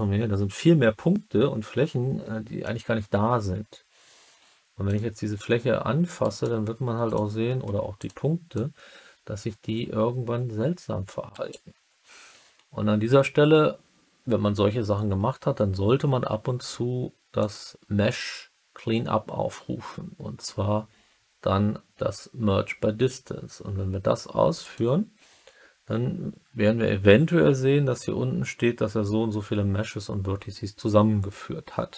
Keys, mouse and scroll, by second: 4.8-6.1 drag, 6.1 middle click, 7.0 click, 7.6 1, 7.9 click, 8.5-11.5 drag, 11.2 right click, 17.3-24.7 drag.